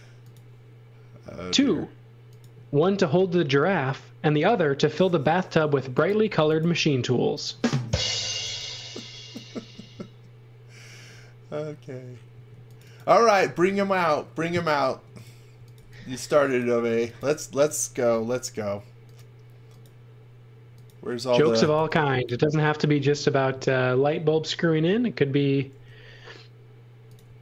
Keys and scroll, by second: 6.2 b, 7.9-9.6 typing, 12.3 space, 14.9-18.1 typing, 21.4 x, 21.7 v, 25.7 m, 27.2-27.4 typing.